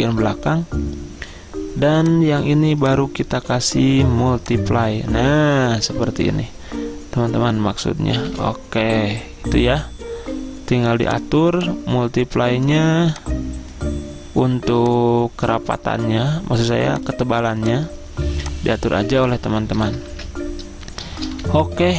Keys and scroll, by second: 8.4 p, 20.2 ctrl+z, 21.5 p.